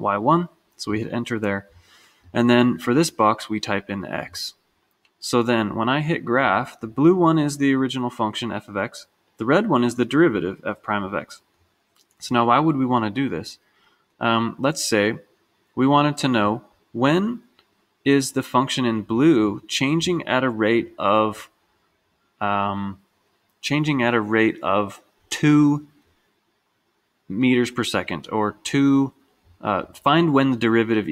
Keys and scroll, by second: 1.1 Return, 2.4 Right, 4.4 x.